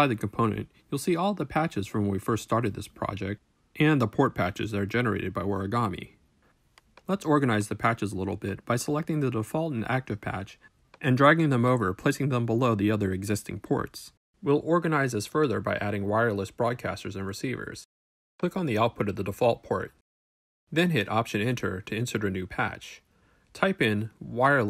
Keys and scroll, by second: 21.2 alt+Return, 23.4-24.5 typing.